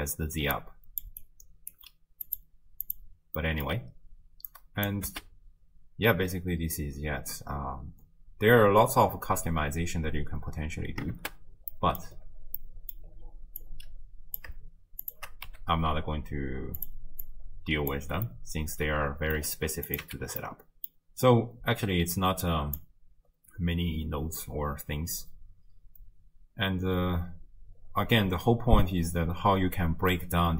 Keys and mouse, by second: 0.5 d, 0.5 click, 1.2 click, 1.2 d, 1.8 d, 2.3-3.0 drag, 2.3 d, 3.4 middle click, 4.5 click, 5.1 space, 10.7 space, 11.7 click, 12.6 click, 13.8 click, 15.1 shift+click, 15.5 g, 17.3 click, 18.3-19.4 middle drag, 19.9 click, 20.1 x, 20.4 middle click, 22.4 click.